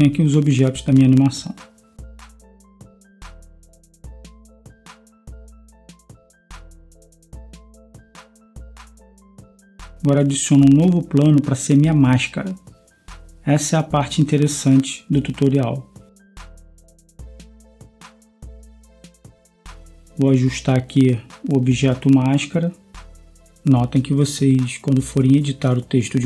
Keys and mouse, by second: 1.5-6.0 drag, 6.0 Escape, 8.1 click, 8.5-12.6 drag, 12.6 space, 20.6 s, 23.0 Tab, 23.9 s.